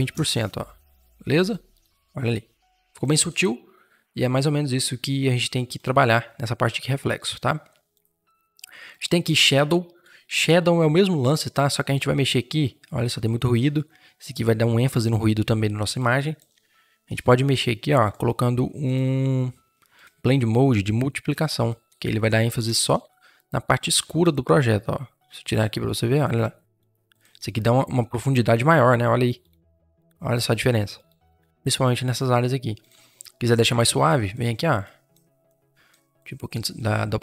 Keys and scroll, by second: 22.5 Return.